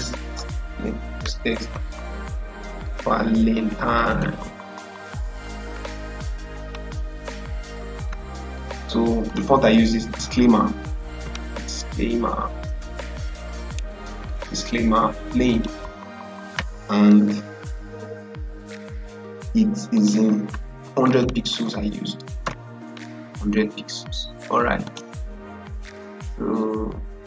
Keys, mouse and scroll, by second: 1.6-5.2 typing, 6.5 click, 10.5-11.6 typing, 13.1-14.3 typing, 15.4 click, 19.8 click, 20.6 ctrl+a, 20.9-22.0 typing, 22.3 Return, 24.7 click.